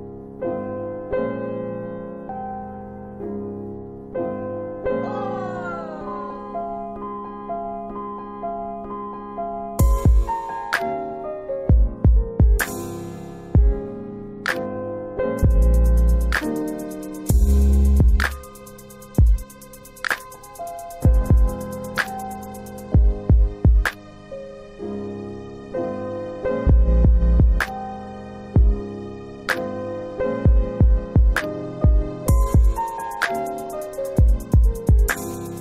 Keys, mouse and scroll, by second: 2.1 shift+click, 3.8 middle click, 5.0 shift+click, 7.1 middle click, 8.1 shift+click, 9.8 middle click, 10.8 shift+click, 13.2 middle click, 15.9 middle click, 16.5 scroll down 1, 17.0 middle click, 18.3 click, 18.9 click, 21.4 click, 24.5 click, 27.1 double click, 31.8 click.